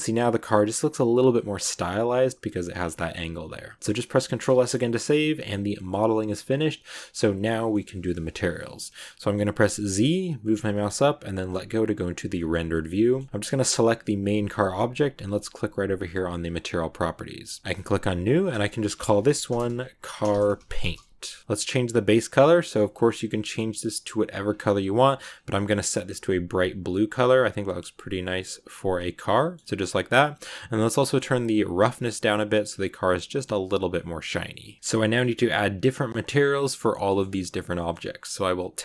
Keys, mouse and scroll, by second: 1.5-2.6 middle drag, 2.6 scroll down 1, 2.8-4.1 middle drag, 4.1 ctrl+s, 4.5-5.3 shift+scroll up 2, 4.5 shift+middle click, 5.3 scroll down 1, 5.4-9.8 middle drag, 9.8 z, 12.3 shift+middle click, 12.4 scroll up 2, 12.6 shift+middle click, 13.4 right click, 16.3 click, 17.6-21.3 drag, 21.4 click, 29.1 scroll down 2, 29.2 middle click, 29.7-30.6 scroll down 10, 30.6-31.3 scroll down 1, 31.8-33.2 drag, 33.2-35.1 middle drag, 35.1 scroll up 1, 35.8 scroll down 2, 36.0-37.9 middle drag, 37.9 scroll up 1, 37.9 middle click, 38.6 Tab, 38.7 scroll up 1.